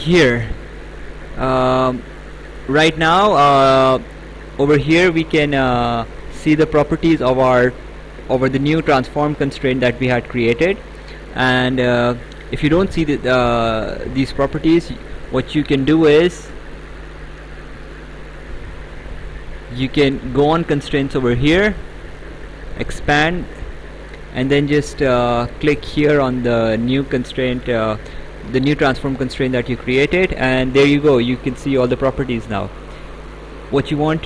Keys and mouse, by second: 16.9 click, 19.8 click, 21.9 click, 29.7 click.